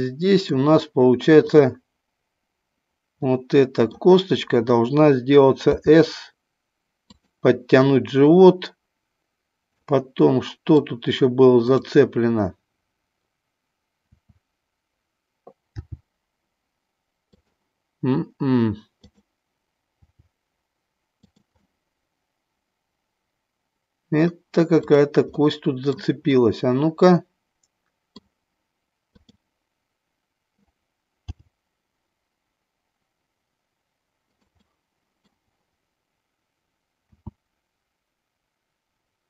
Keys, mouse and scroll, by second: 1.3-2.4 drag, 3.2 middle click, 5.6 s, 9.8 middle click, 11.7 click, 14.0 d, 15.7 g, 17.4 click, 19.9 g, 21.7-24.3 middle drag, 21.7 scroll up 1, 25.8 middle click, 26.3-28.1 middle drag, 29.1 click, 31.2 g, 34.3 click, 34.7 middle click, 37.1 s.